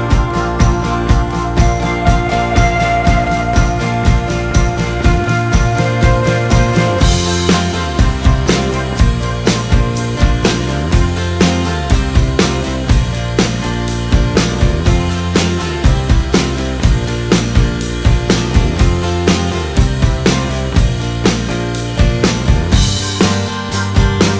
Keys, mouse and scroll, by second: 7.5-22.9 drag.